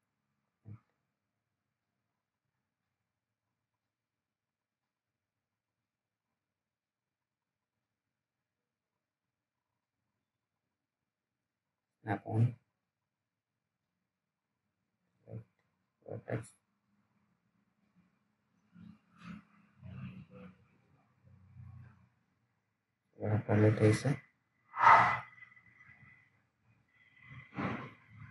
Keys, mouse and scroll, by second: 3.2 alt+middle click, 5.1 1, 7.5-8.4 scroll down 1, 8.4-8.9 scroll up 1, 8.9 click, 11.6 s, 13.0 click, 17.1-18.0 scroll down 1, 18.0 click, 22.4-23.3 scroll up 1, 23.3 click, 25.0-26.3 scroll down 1, 26.5 alt+middle click.